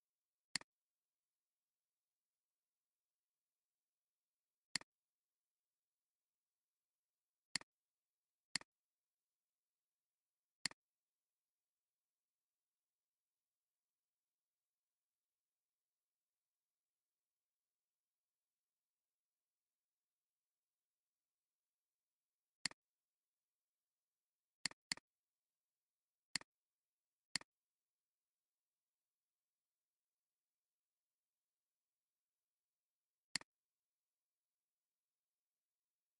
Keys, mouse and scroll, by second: 4.1 ctrl+z, 8.2-8.9 alt+scroll down 2, 8.4 space, 8.9 space, 10.4 space, 24.7 double click, 29.2-30.7 typing.